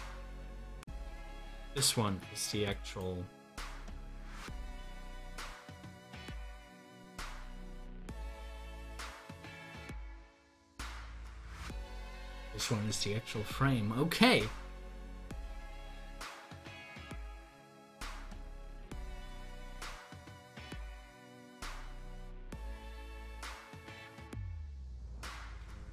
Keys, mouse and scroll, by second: 1.7 click, 2.8 double click, 6.3 click, 8.7 d, 10.2 scroll up 1, 10.6 middle click, 11.6 scroll up 1, 12.2-15.4 middle drag, 18.0-21.0 middle drag, 23.0 click, 25.4 ctrl+z.